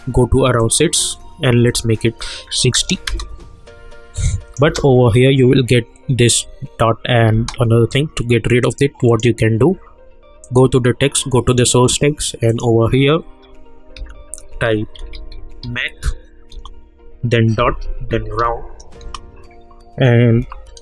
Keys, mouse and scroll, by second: 0.6 click, 3.0 Return, 4.2 click, 4.7 space, 7.3 space, 8.6 click, 14.0 Left, 14.7-16.1 typing, 16.5 Return, 17.3-18.9 typing, 19.0 Return, 20.3 Right.